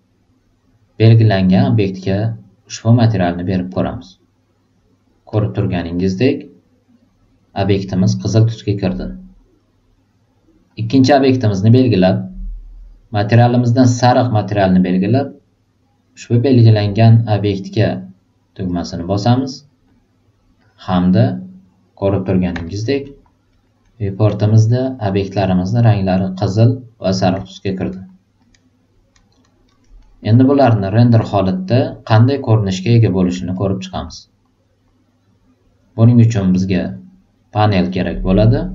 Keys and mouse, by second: 5.3 click, 5.9 drag, 10.7-11.5 drag, 13.7-18.6 right drag, 19.8 click, 20.5 click, 22.6 alt+right click, 23.0 alt+middle click, 23.5 alt+right click, 23.8 alt+middle click, 24.8 drag, 25.3-25.7 drag, 27.7-28.0 alt+middle drag, 28.3 alt+click, 29.6 alt+right click, 30.0 alt+middle click, 30.5 alt+click, 33.5 alt+right click, 33.9 alt+middle click, 37.5 click.